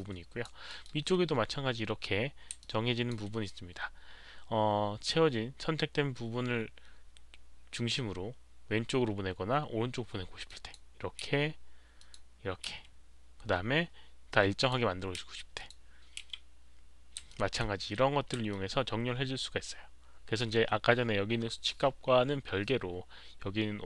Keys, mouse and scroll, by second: 0.6 alt+middle click, 2.5 alt+click, 2.5 alt+middle click, 2.5 z, 7.7 alt+click, 7.7 alt+middle click, 7.7 z, 10.4 click, 10.7 alt+middle click, 11.2 z, 11.9 alt+click, 12.6 alt+click, 12.6 z, 14.5 click, 15.1 z, 15.5 click, 16.1 z, 17.2 alt+click, 18.5-20.3 alt+drag, 21.2 alt+click, 21.2 z.